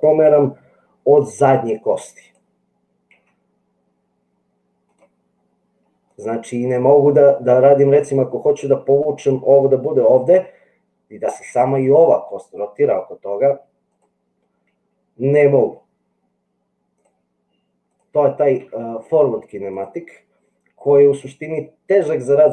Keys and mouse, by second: 0.4 g, 2.3 click, 3.2 g, 13.8 click, 15.7 g, 17.9 click.